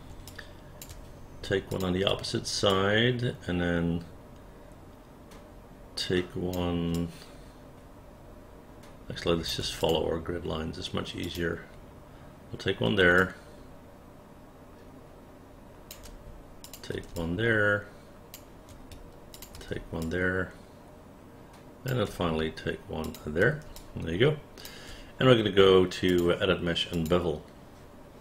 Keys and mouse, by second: 0.4 alt+click, 1.8 shift+click, 2.8-6.6 alt+drag, 7.0-9.6 alt+drag, 9.9 click, 11.3 click, 13.3-16.0 alt+drag, 16.7 shift+click, 17.3-18.4 alt+drag, 19.4 shift+click, 20.1-22.0 alt+drag, 23.2 shift+click, 23.9 alt+click.